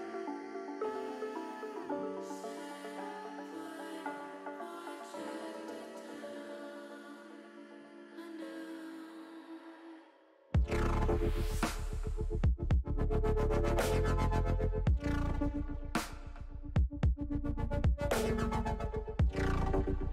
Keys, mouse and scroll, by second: 0.6 click, 1.4 ctrl+r, 5.5 click, 6.3 ctrl+r, 8.8 click, 9.8 ctrl+r, 13.4 click, 14.2 ctrl+r, 17.7 click, 19.0 middle click, 19.6 shift+middle click.